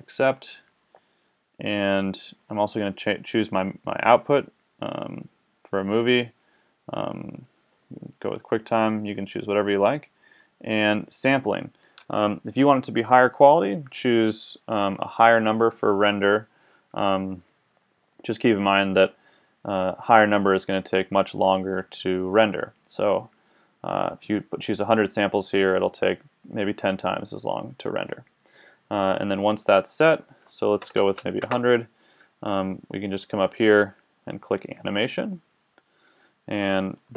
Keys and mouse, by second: 0.0-4.3 drag, 29.2-31.2 drag, 31.2 KP_0, 37.0 click.